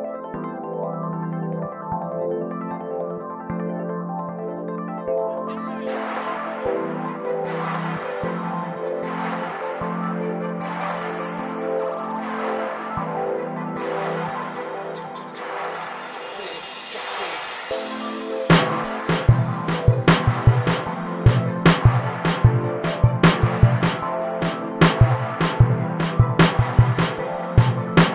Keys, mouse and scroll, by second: 0.9 g, 1.7 Tab, 2.7 Tab, 2.9 w, 4.6-5.4 right drag, 5.4 s, 6.2-6.9 drag, 6.9 s, 8.9 g, 10.5 scroll down 2, 10.8 scroll up 1, 11.1 right click, 11.2 shift+a, 12.1 s, 14.1 right drag, 14.4-14.9 middle drag, 14.9 right click, 15.5 click, 15.8-19.7 drag, 19.7 0, 20.5-23.2 drag, 23.2 scroll up 7, 24.2-26.7 drag, 27.3-28.1 drag.